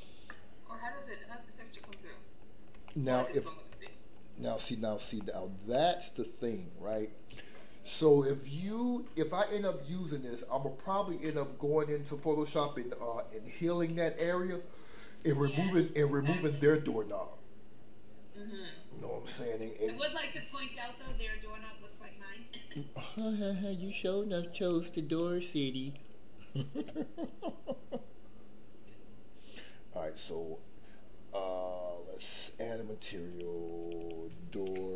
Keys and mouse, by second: 1.9 middle click, 2.8 shift+middle click, 3.8 shift+middle click, 4.6 middle click, 5.1 shift+middle click, 5.7-6.8 middle drag, 24.7 click, 33.8 click, 34.1-34.9 drag.